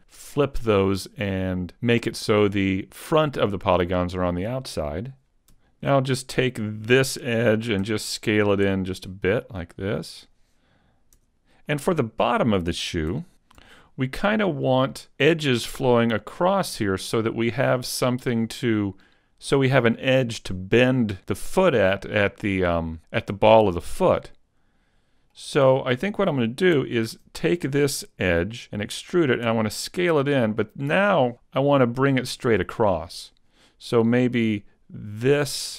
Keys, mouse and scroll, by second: 5.2 ctrl+right click, 5.6 alt+right click, 7.8 e, 8.2 click, 8.6 s, 10.3 click, 11.2 Tab, 11.7 middle click, 13.1 Tab, 13.5 scroll down 1, 17.2 middle click, 23.8 middle click, 26.9 alt+right click, 28.6 e, 28.8 click, 29.5 s, 31.3 click, 31.4 middle click, 35.2 right click.